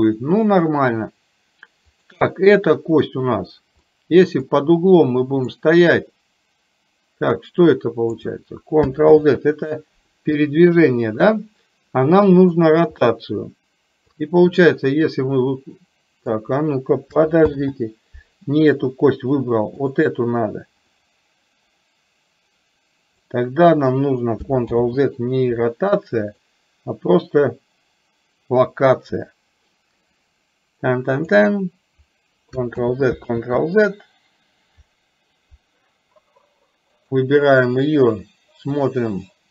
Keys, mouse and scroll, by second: 3.9 middle click, 5.9-8.2 drag, 10.5 middle click, 12.7 click, 13.1-14.2 middle drag, 15.4-16.5 drag, 19.9 click, 21.0-23.4 drag, 26.6-31.4 drag, 32.9 ctrl+z, 33.4 ctrl+z, 37.0 click, 38.9-39.5 drag.